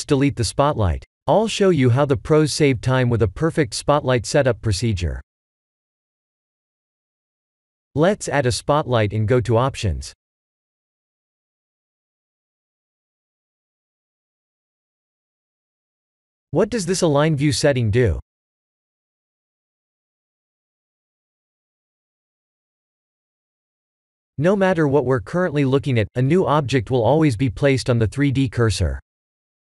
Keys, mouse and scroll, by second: 1.0 middle click, 2.3 scroll up 2, 3.3-4.0 scroll up 2, 4.3 shift+a, 14.0 click, 16.2 click, 21.3-21.9 scroll up 7, 23.4 middle click, 26.3 middle click, 26.8 middle click, 28.3 middle click.